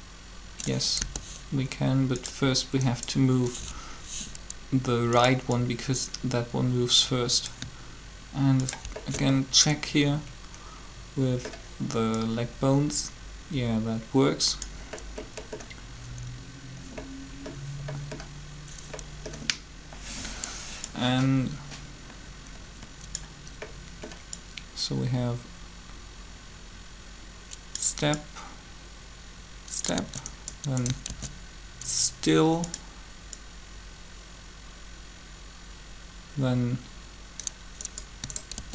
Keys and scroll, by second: 1.0 g, 31.1 shift+d, 38.5 shift+d.